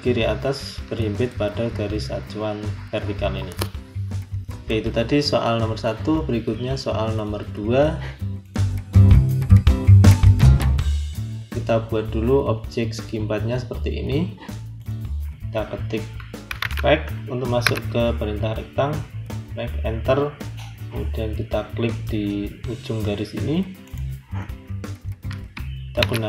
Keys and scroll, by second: 16.1-17.5 typing, 18.6 Return, 25.9 shift+2.